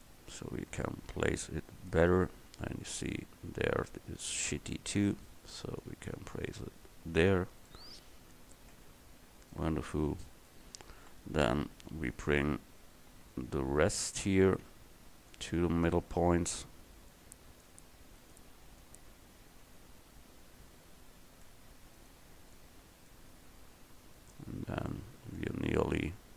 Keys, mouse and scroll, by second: 0.1-2.0 drag, 2.8 Tab, 4.6 l, 5.9-7.7 drag, 8.8 Tab, 11.1 KP_1, 12.6 KP_2, 13.3 KP_3, 18.3 right click, 18.9-20.4 middle drag, 20.4-21.5 right drag, 22.1-22.6 right drag, 22.6-24.3 middle drag, 24.3 right click, 26.2 a.